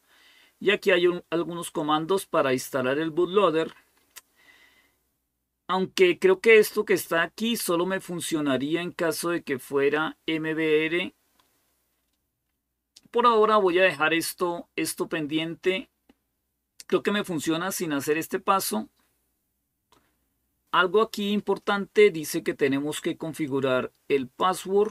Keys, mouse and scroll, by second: 11.0-13.1 scroll down 1, 23.2-24.9 drag.